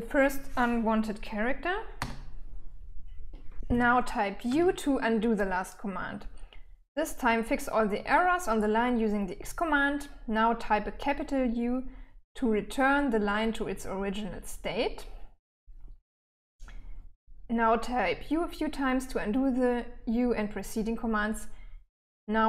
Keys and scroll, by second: 1.4 x, 3.9 u.